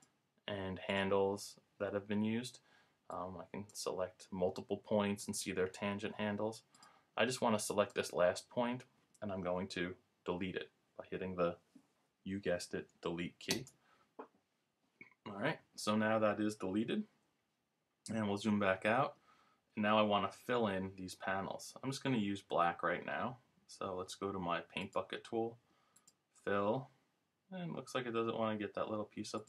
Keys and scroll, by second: 18.5 super+-.